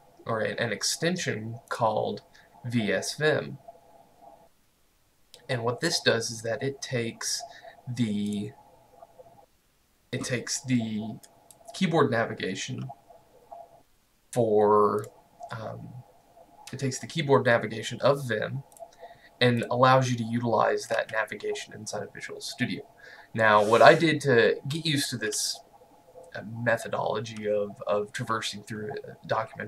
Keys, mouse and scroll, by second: 1.8 click, 7.6-8.4 scroll down 1, 8.4 click, 15.1 click, 18.8 click.